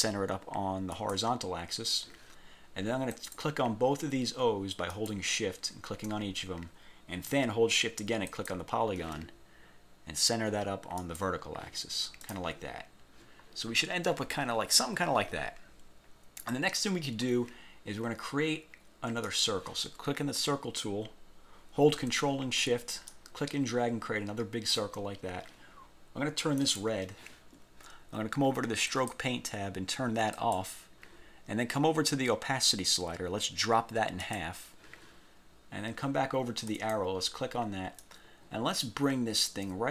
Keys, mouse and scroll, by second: 1.1 click, 3.3 click, 5.0 shift+click, 8.4 shift+click, 11.1 click, 12.3 click, 16.6 scroll down 1, 19.4 click, 20.2-20.7 scroll down 1, 21.1 scroll up 2, 21.7 scroll up 2, 23.2-25.0 ctrl+shift+drag, 26.7 click, 29.0 click, 30.5 click, 34.3 click, 36.8 click, 38.1-39.9 drag.